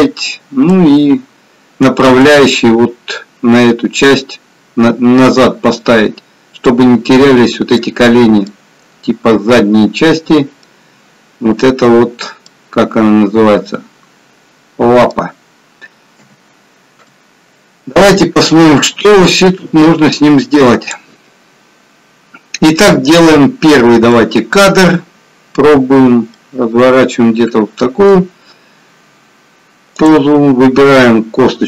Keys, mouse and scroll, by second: 19.1 click, 21.6-22.6 scroll down 1, 24.1 middle click, 28.1-28.8 scroll down 1, 28.8-29.4 scroll up 1, 29.4-29.8 scroll up 1, 30.3 click.